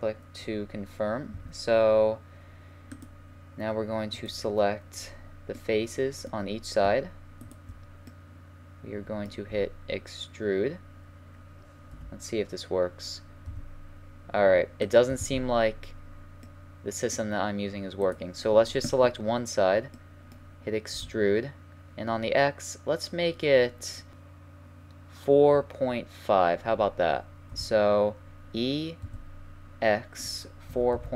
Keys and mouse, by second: 0.4-1.3 middle drag, 1.3 a, 3.0-4.8 drag, 4.3-5.9 right drag, 5.6-7.4 drag, 7.4 right click, 9.5 e, 15.3 ctrl+z, 15.8-18.0 middle drag, 18.0-19.7 right drag, 19.7-21.0 middle drag, 21.0 e, 27.5 e.